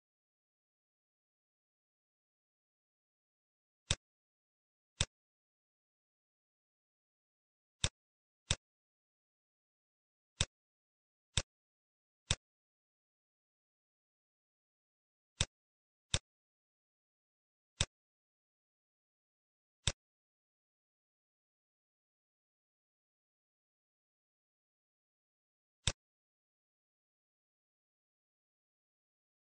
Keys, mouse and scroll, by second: 0.0-1.8 scroll up 5, 0.5 middle click, 2.2-3.0 scroll up 1, 3.2-3.5 scroll down 1, 3.8 click, 4.3 shift+a, 10.3 click, 11.3 click, 11.7 shift+a, 17.8 click, 19.7 click.